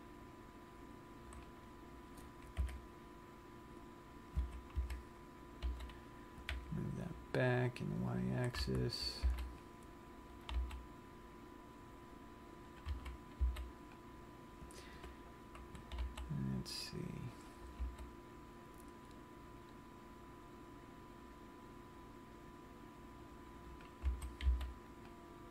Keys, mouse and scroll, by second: 0.0 g, 1.8 click, 2.8 KP_3, 4.8 a, 5.2 a, 6.2 g, 8.5 click, 9.0 a, 9.4 c, 10.7 right click, 11.0 g, 13.1 click, 13.5 a, 13.9 c, 18.2 g, 24.3 click, 24.7 a, 24.9 c.